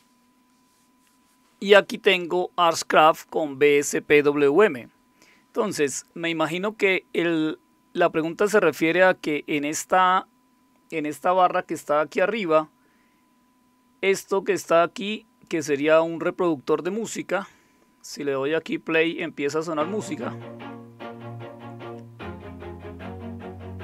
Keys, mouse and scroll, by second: 14.0-15.5 drag, 19.0 click.